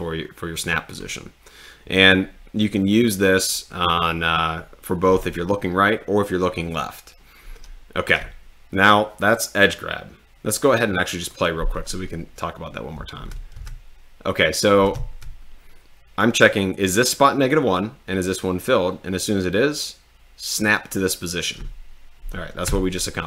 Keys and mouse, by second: 11.2 click, 13.1 d, 13.6 w, 14.9 d, 22.7 s.